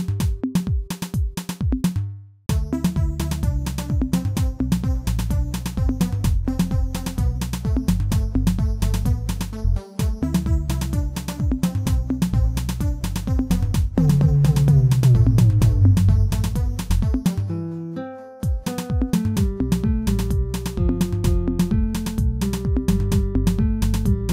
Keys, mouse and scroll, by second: 0.4 KP_7, 1.4 shift+z, 1.5 shift+middle click, 2.4-4.5 drag, 4.5 middle click, 5.2 shift+z, 5.3-6.5 middle drag, 6.5-7.3 scroll up 1, 7.3 s, 9.2-10.4 shift+middle drag, 10.4 click, 10.8 shift+click, 11.6 s, 14.0 Tab, 14.4 middle click, 15.3 Tab, 15.6-18.1 middle drag, 18.1 g, 19.6-21.1 middle drag, 21.1 click, 21.5-22.8 shift+drag, 22.8 g.